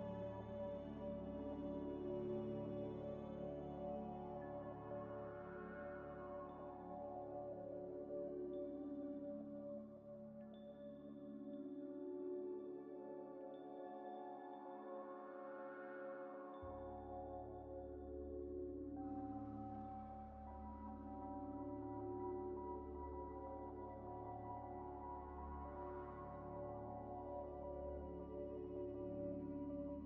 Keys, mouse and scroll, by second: 0.4 l, 1.7 l, 2.3 double click, 3.0-5.0 typing, 4.7 double click, 5.6 double click, 6.3 j, 7.0 ل, 7.7 double click, 8.0 ل, 8.9 double click, 11.4 Delete, 13.1 ش, 13.9 ش, 13.9 middle click, 14.4 scroll down 1, 15.2 Tab, 15.3 z, 15.6 scroll down 1, 15.9 middle click, 16.2 s, 17.5 ذ, 18.5 Tab, 18.7 Tab, 19.0 ث, 20.6 ctrl+ئ, 20.9 alt+ث, 21.5 scroll down 1, 23.3 middle click, 23.5 Tab, 24.1 ئ, 29.2 middle click, 29.6-30.0 typing.